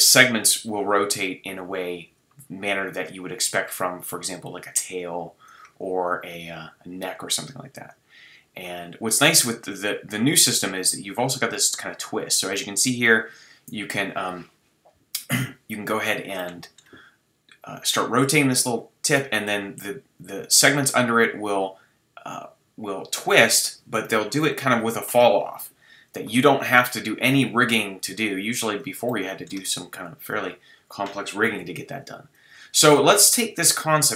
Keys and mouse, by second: 4.6-16.4 drag, 16.4-17.9 middle drag, 17.9-29.1 drag, 29.1-29.6 middle drag, 29.6 Tab, 31.6 x.